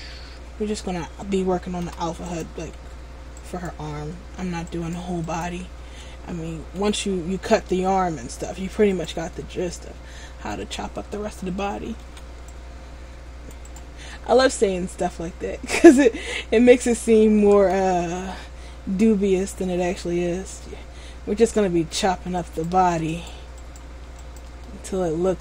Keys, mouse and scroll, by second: 2.0 p, 3.5 alt+right click, 4.9 alt+right click, 5.4 right click, 5.6 alt+right click, 6.9 c, 9.5 middle click, 12.2 c, 13.9 right click, 14.3 middle click, 16.4 scroll down 2, 16.7 middle click, 17.7 a, 18.4 middle click, 22.6 right click, 23.3 shift+right click, 24.8 right click, 24.8 middle click.